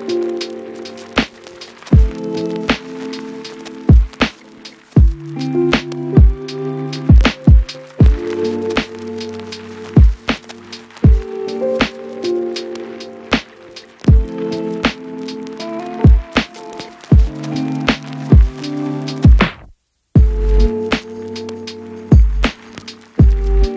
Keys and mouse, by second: 0.2 shift+z, 0.4 ctrl+b, 1.3 shift+z, 1.7 g, 2.1 ctrl+b, 2.3 shift+middle click, 2.5 shift+z, 2.6 alt+middle click, 2.9 alt+e, 3.1 shift+middle click, 4.0 middle click, 4.2 Tab, 4.3 Tab, 4.6 alt+click, 4.7 alt+shift+click, 5.4 q, 5.6 Tab, 6.2 shift+z, 6.5 alt+click, 6.6 shift+middle click, 7.7 middle click, 8.0 Tab, 8.0 a, 8.1 a, 8.4 middle click, 8.6 Tab, 9.9 alt+click, 10.3 Tab, 10.7 g, 10.9 shift+click, 11.6 Tab, 14.2 Tab, 14.2 u, 14.4 middle click, 14.8 shift+Tab, 14.8-16.5 shift+drag, 16.5 Tab, 16.6 a, 16.8 Tab, 16.8 a, 16.9 u, 18.5 Tab, 18.5 middle click, 18.7 Tab, 18.7 middle click, 18.8 u, 19.1 alt+middle click, 19.3 alt+shift+middle click, 19.6 shift+middle click, 19.7-21.2 shift+drag, 20.5 right click, 21.0 Tab, 21.8 u, 22.4 shift+click, 22.6 shift+click, 22.7 shift+click, 22.9 shift+middle click, 23.2 click.